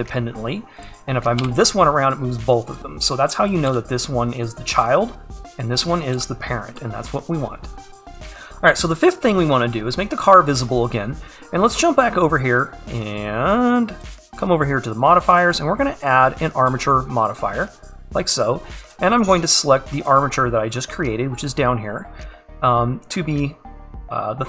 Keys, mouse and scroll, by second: 3.5 click, 4.8 g, 6.1 click, 6.7 g, 8.5 click, 16.7-24.4 drag.